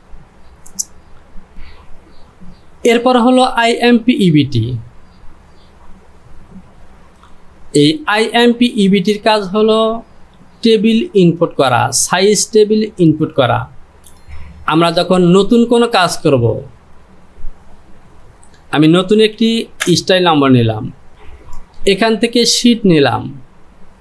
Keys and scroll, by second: 19.4 k, 19.8 b, 21.1 Return.